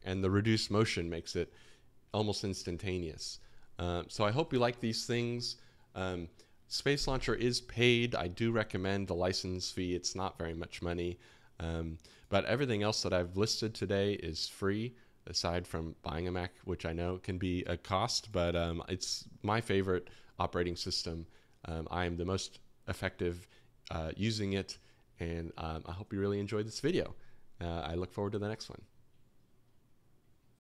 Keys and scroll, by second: 26.4-28.1 typing, 30.1-30.6 typing.